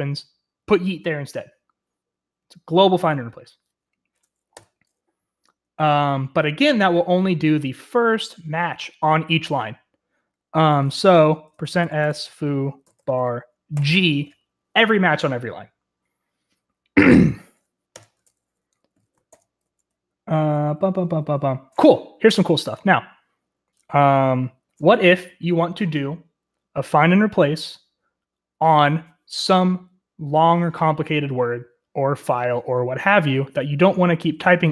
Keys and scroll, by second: 4.5 u, 11.2-13.7 typing, 17.8 Escape, 19.2 ctrl+c, 19.6-21.1 typing.